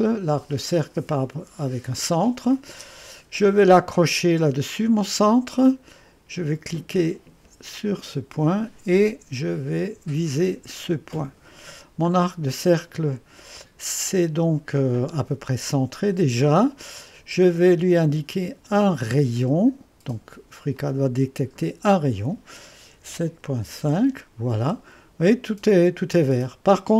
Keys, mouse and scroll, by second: 2.3 click, 5.0 click, 7.9 click, 10.7 click, 12.1-12.5 scroll up 1, 12.7 right click, 17.0 right click, 18.6 click, 20.8 click, 22.7-24.1 typing.